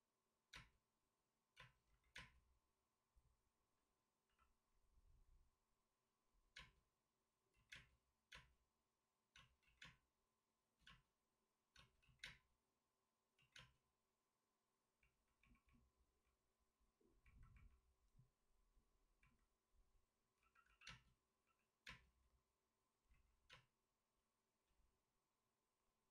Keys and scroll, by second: 0.5 space, 1.5 space, 1.8 ctrl+z, 2.1 space, 4.2 c, 6.5 space, 7.5 ctrl+z, 7.6 space, 8.3 space, 9.6 ctrl+z, 9.7 space, 12.0 ctrl+z, 12.1 space, 13.3 ctrl+z, 13.5 space, 20.6 x, 20.8 space, 21.8 x, 21.8 space, 23.0 ctrl+z, 23.4 space.